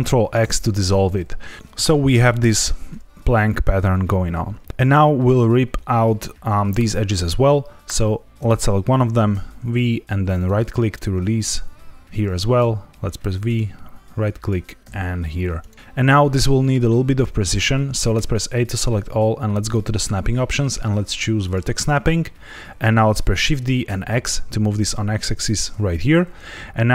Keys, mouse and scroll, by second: 0.3 ctrl+x, 7.8 click, 9.3 v, 10.3 right click, 11.3 click, 12.5 v, 13.4 right click, 14.3 click, 14.8 v, 15.5 right click, 15.7 click, 18.1 a, 18.4 middle click, 19.5 click, 23.3 shift+d, 23.8 x, 25.4 click.